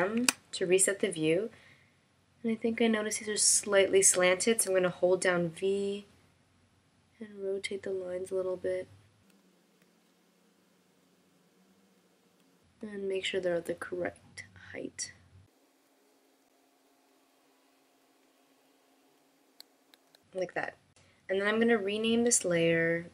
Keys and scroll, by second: 1.5 shift+m, 6.1 v, 10.4 v, 14.0 v, 20.6 v.